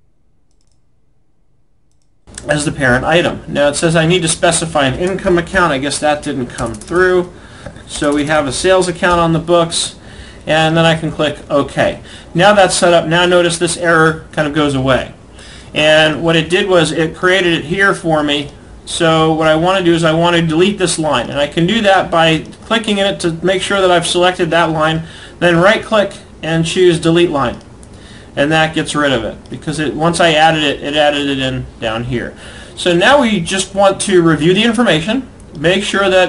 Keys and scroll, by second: 6.7 BackSpace.